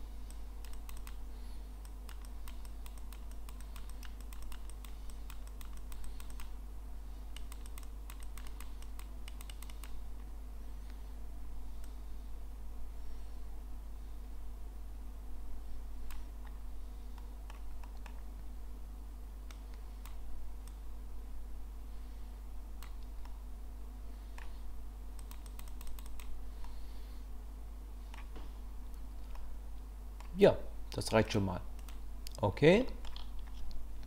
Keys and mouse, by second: 0.3 click, 0.7 click, 1.0 click, 2.0 click, 2.4 click, 2.7 click, 3.0 click, 3.3 click, 3.6 click, 3.9 click, 4.2 click, 4.4 click, 4.7 click, 5.1 click, 5.5 click, 5.8 click, 6.0 click, 6.3 click, 7.4 click, 7.7 click, 7.8 click, 8.2 click, 8.5 click, 8.8 click, 9.3 click, 9.5 click, 9.7 click, 11.9-16.1 drag, 17.2 middle click, 17.8 middle click, 19.5 click, 20.7-22.8 drag, 23.2-24.4 drag, 25.2 click, 25.5 click, 25.7 click, 25.9 click, 26.1 click, 26.7-28.1 middle drag, 29.4 middle click, 31.2 click, 32.9 shift+drag.